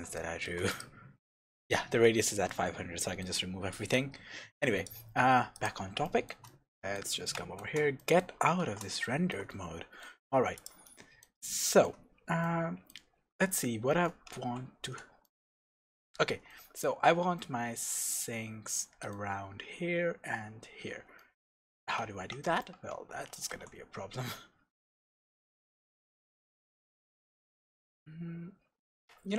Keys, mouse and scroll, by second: 0.1 shift+middle click, 0.7 click, 1.4-3.9 shift+middle drag, 3.9-6.0 drag, 6.0-10.5 shift+middle drag, 8.6 shift+z, 10.2 scroll up 2, 10.5 click, 10.8-29.3 middle drag, 12.0-12.4 scroll down 1, 14.3 Tab, 16.2 scroll down 2, 17.0-17.3 scroll up 2, 22.5 Tab, 23.5 ctrl+r.